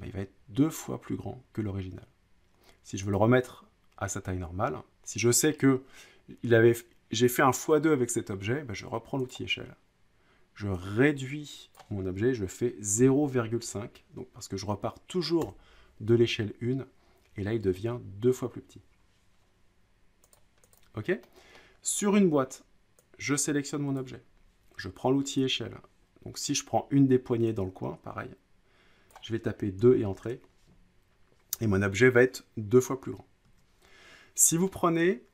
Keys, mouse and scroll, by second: 3.1 click, 9.3 click, 11.7-12.9 drag, 12.7-14.1 typing, 15.4 Return, 20.3 click, 20.7 click, 21.6 middle click, 21.7-22.5 scroll, 24.0 click, 25.4 click, 29.1 click, 29.8 2, 30.2 click, 33.4 ctrl+z.